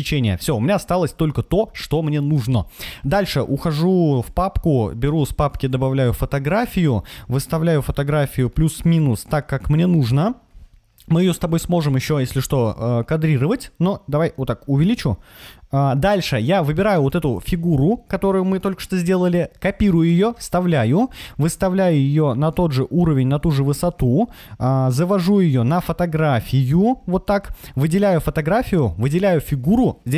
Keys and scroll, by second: 19.5 super+c, 19.9 super+v.